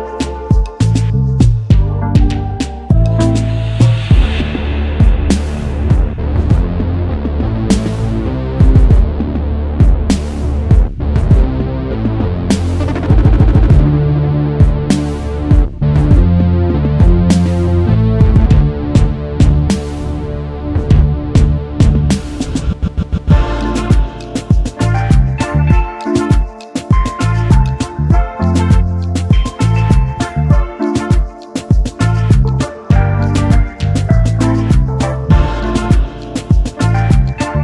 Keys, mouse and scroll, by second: 0.9 space, 2.2 right click, 4.6 double click, 4.9 alt+scroll down 1, 5.0 space, 6.2 alt+shift+click, 7.2 space, 7.7 alt+scroll up 1, 8.4 alt+scroll up 1, 10.4 alt+scroll down 1, 16.9 right click, 22.3 double click, 29.4 ctrl+shift+[, 32.6 double click.